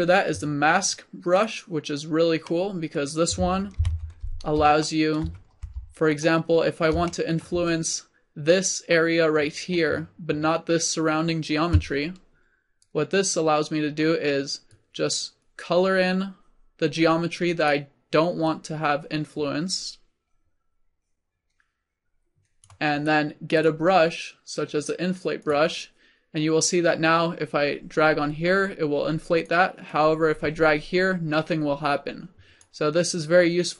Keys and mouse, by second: 1.3-2.6 middle drag, 2.6-3.8 drag, 4.0 click, 4.7 middle click, 5.7 f, 12.8-16.5 drag, 18.5-20.3 drag, 23.6-25.6 drag, 26.7-31.9 drag.